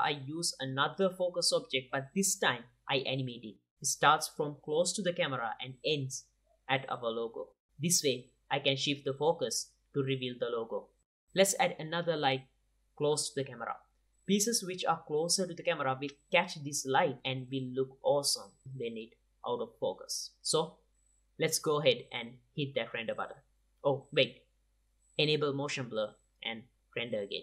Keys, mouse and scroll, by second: 0.3-1.2 drag, 1.4 g, 2.0-3.1 drag, 3.9-6.0 drag, 6.7 click, 7.4 i, 8.1-8.6 drag, 8.6 shift+s, 9.0 i, 9.5 t, 9.7-10.4 drag, 12.6 click, 13.3-13.8 drag, 13.5-14.9 typing, 14.6 click, 15.1 click, 15.4 click, 16.3 drag, 16.7-17.7 drag, 17.5 g, 17.7 middle click, 17.9 click, 18.1 g, 18.3 drag, 19.5 ctrl+s, 20.6 click, 20.7 ctrl+s, 20.9 ctrl+s, 21.1 click, 21.8 ctrl+s, 23.8-27.4 drag.